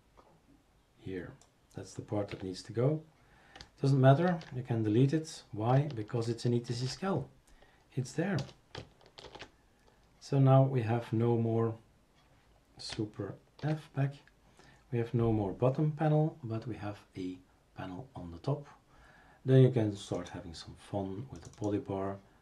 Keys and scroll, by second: 2.3 Delete, 4.3 ctrl+s, 6.7 shift+super+t, 8.4 BackSpace, 9.3 shift+super+r, 13.6 super+f.